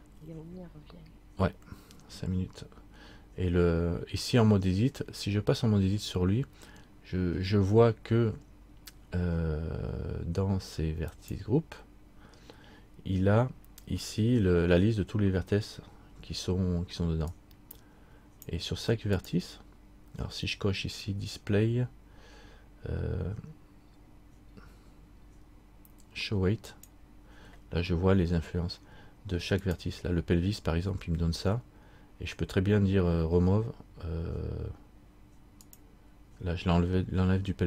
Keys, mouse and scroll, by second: 11.3 click, 15.6-17.5 scroll down 1, 17.5 click, 21.1-22.5 scroll down 1, 26.9 click, 26.9-28.6 scroll down 1, 35.8-37.6 click.